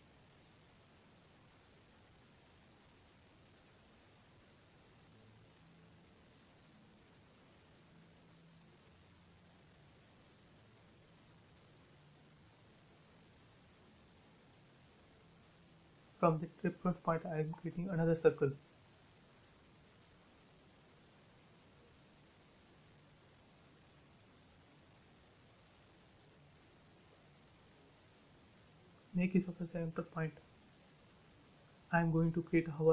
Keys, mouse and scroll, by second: 0.0 Right, 2.2 2, 2.7 Return, 3.0 space, 3.7-4.1 scroll down 1, 4.6 shift+middle click, 5.4-5.8 scroll up 1, 6.6 middle click, 7.6 scroll down 1, 8.1-9.5 middle drag, 9.6-10.0 scroll down 1, 10.1-12.5 shift+middle drag, 12.5 scroll up 1, 13.2 a, 14.1 space, 15.2 c, 15.7 click, 18.5-18.9 typing, 21.6 Return, 21.8 space, 22.8 click, 23.1 right click, 23.9 click, 24.6-24.9 scroll up 1, 25.3 middle click, 25.8 scroll up 1, 26.7 a, 30.2 click, 32.1 space.